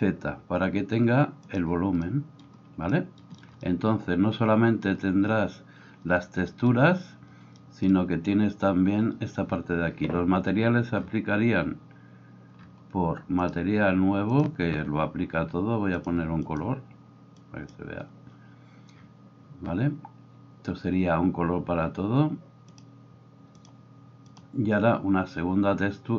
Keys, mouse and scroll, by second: 1.6-13.5 middle drag, 13.5-16.1 drag, 16.1 middle click, 16.4 click, 16.7-22.7 middle drag, 22.7 click, 22.9-26.1 middle drag.